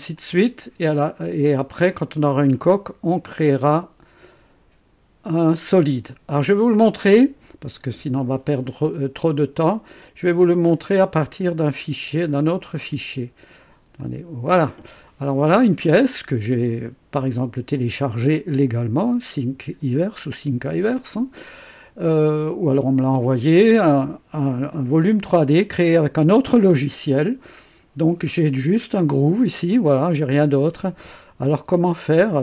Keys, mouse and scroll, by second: 0.1 ctrl+click, 7.1-7.9 drag, 9.3 click, 11.2 click, 13.9 click, 15.0 scroll up 1, 15.8-16.5 right drag, 17.3-19.9 drag, 20.9-23.7 drag, 25.2-27.2 drag, 29.7-31.1 drag, 31.6 scroll up 2, 32.1 click.